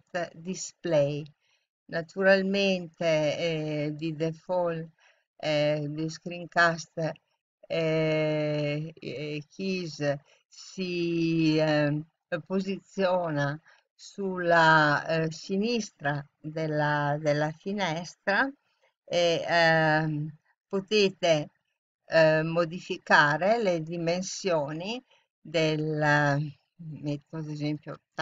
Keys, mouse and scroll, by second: 20.4-28.2 drag.